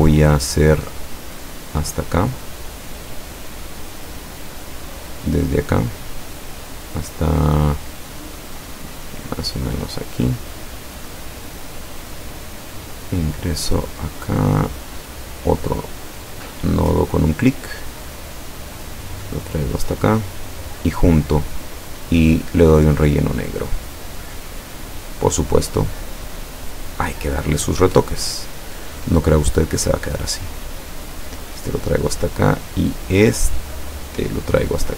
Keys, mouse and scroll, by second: 0.5 click, 5.5 click, 9.8 click, 15.6 click, 19.8 click, 20.7 click, 22.4 click, 25.1 click, 28.4-28.9 ctrl+scroll up 2, 29.9-31.6 drag, 32.0 click, 32.9 click, 33.5-34.6 drag.